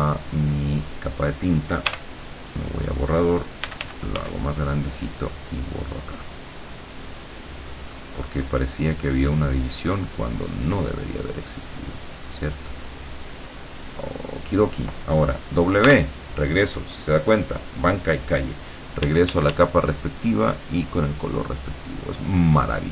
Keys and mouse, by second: 0.0 click, 1.9 e, 3.7 f, 4.5-8.0 drag, 8.3-10.8 drag, 11.4-14.7 drag, 15.9 w, 19.0 d, 19.9-21.4 drag, 22.2 click.